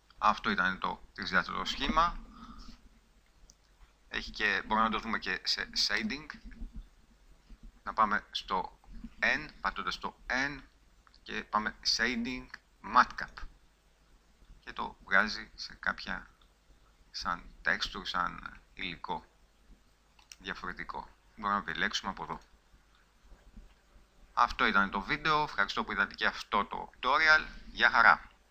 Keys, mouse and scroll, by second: 2.6 KP_5, 6.5 n, 22.7 middle click.